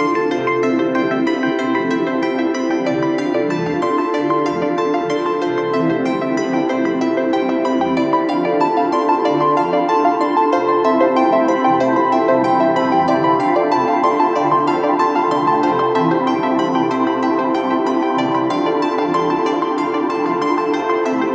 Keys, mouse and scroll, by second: 1.7 alt+shift+click, 5.1 ctrl+t, 5.7 alt+shift+click, 11.0 Return, 16.4-19.0 scroll down 1, 19.2 double click, 20.5-21.3 typing.